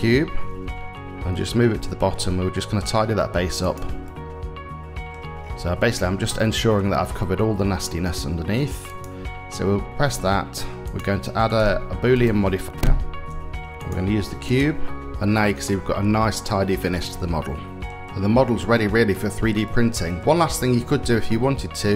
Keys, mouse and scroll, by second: 0.8 g, 3.7-4.8 middle drag, 6.0 shift+middle click, 6.8-8.2 middle drag, 8.5 click, 10.5 click, 11.1-13.6 drag, 13.6 o, 15.0 middle click, 15.8-17.5 middle drag, 19.3-19.8 middle drag.